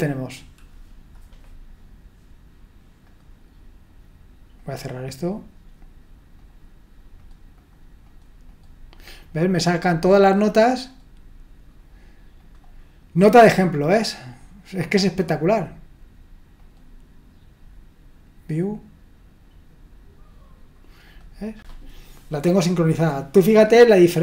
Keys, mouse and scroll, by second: 3.0 click, 4.6 click, 6.4 click, 7.2 click, 7.6 click, 8.1 click, 8.5 click, 9.2 click, 9.6 click, 10.8 click, 12.4 click, 13.2 click, 16.6 click, 21.0 click.